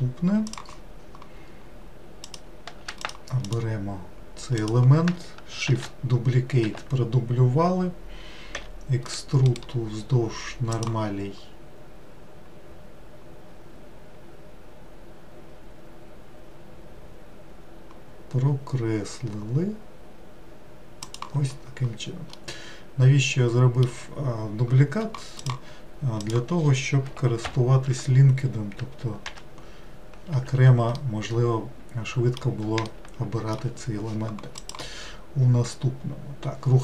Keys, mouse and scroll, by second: 2.3 click, 3.1 shift+click, 3.5 shift+click, 4.7 shift+click, 5.8 shift+d, 8.6 e, 9.5-22.4 right drag, 22.4-25.4 middle drag, 26.3 click, 27.5 ctrl+l, 29.3 g, 31.0-36.0 middle drag.